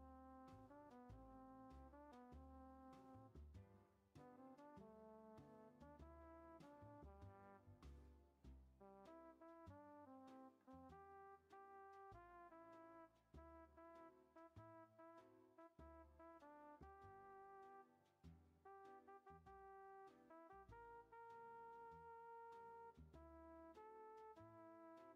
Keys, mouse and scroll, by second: 0.4-0.9 scroll down 1, 0.9-2.0 middle drag, 5.3-5.7 middle drag, 5.7 scroll up 1, 6.1 click, 9.0-11.0 drag, 16.5-18.3 middle drag, 18.3-24.0 drag, 24.0-25.1 shift+middle drag.